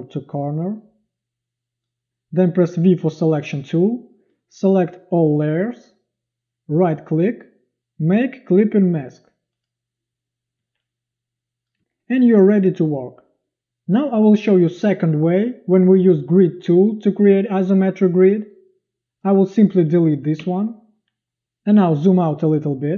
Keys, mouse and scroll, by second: 2.8 v, 10.6 z, 12.8 click, 20.4 Delete, 22.0 z.